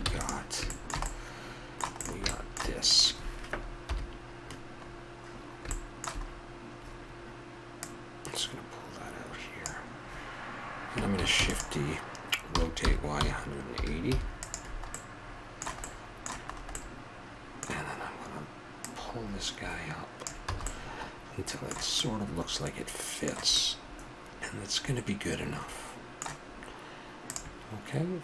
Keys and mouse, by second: 0.0 ctrl+s, 3.5 middle click, 3.8 KP_7, 7.4 middle click, 7.8-9.5 drag, 11.4 shift+d, 12.5 r, 14.9-15.7 middle drag, 18.8-20.7 drag, 20.5 a, 20.7-21.1 middle drag, 24.2-25.5 middle drag, 27.2-28.2 drag.